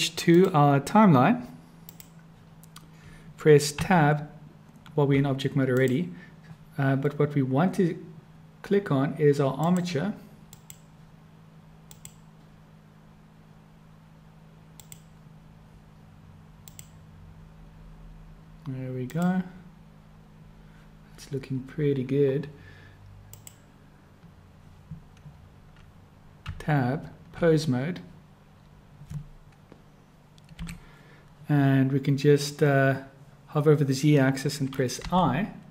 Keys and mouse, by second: 0.2-2.0 drag, 3.8 Tab, 5.8 click, 9.6 click, 10.4 click, 11.9 click, 14.8 click, 16.8 click, 19.1 click, 23.2 click, 26.4 Tab, 35.0 i.